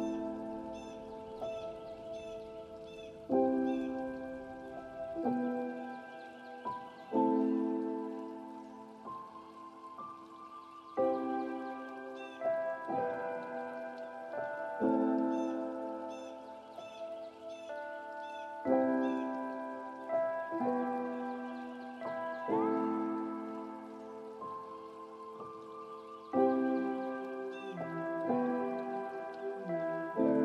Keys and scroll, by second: 17.7 ctrl+space, 28.1 ctrl+space.